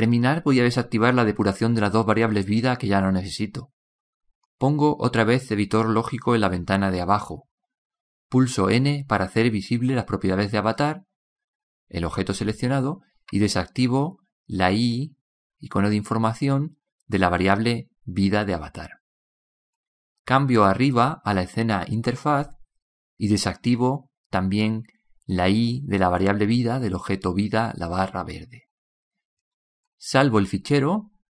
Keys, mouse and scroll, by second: 22.0-23.0 drag.